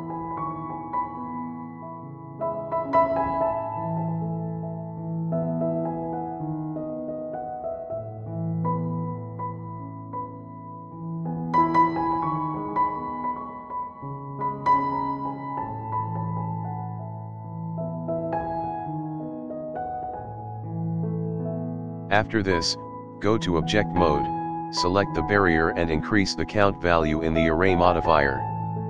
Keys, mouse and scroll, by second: 0.4 shift+middle click, 0.5 shift+middle click, 0.6 shift+middle click, 0.8 scroll up 4, 1.0 click, 1.2 g, 2.1 KP_7, 2.3 KP_Decimal, 2.5 scroll down 5, 2.7 scroll up 2, 2.8-3.1 middle drag, 3.2-4.0 scroll down 4, 3.3-3.7 middle drag, 3.8 shift+middle click, 4.0 shift+middle click, 4.1-4.5 scroll up 2, 4.3 click, 4.5 KP_Decimal, 4.7 middle drag, 5.0-5.5 scroll down 15, 5.5 shift+middle click, 5.7 shift+middle click, 6.0 KP_7, 6.2 shift+middle click, 6.4 click, 6.7 e, 7.6 shift+middle click, 8.2 click, 8.6 e, 9.4 e, 10.3 e, 11.0 e, 12.4 shift+middle click, 12.8 e, 13.5 e, 14.2 e, 14.9-15.2 shift+middle drag, 15.3-21.8 typing, 22.9 e, 23.7 e, 25.1 e, 25.9 shift+middle drag, 26.2 scroll up 1, 26.2-28.8 drag.